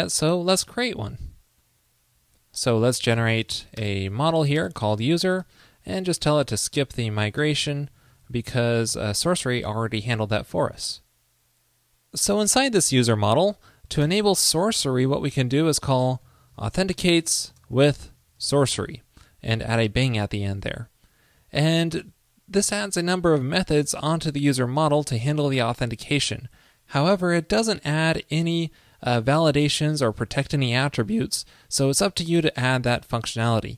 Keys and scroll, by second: 0.7 super+s, 11.4 super+Left, 14.1 super+Return.